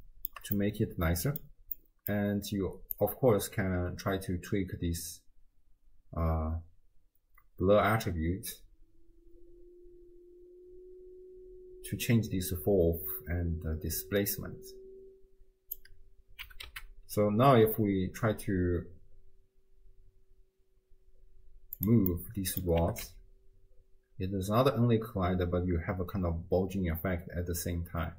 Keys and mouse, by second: 0.0 shift+middle click, 0.7-1.5 middle drag, 1.8 middle click, 3.0-15.8 drag, 16.4 g, 22.3 middle click, 22.8 g.